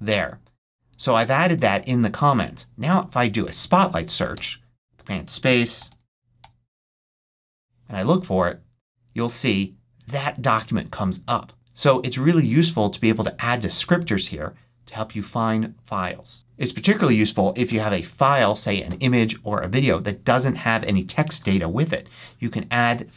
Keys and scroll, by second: 5.4 super+a, 5.4-7.8 typing.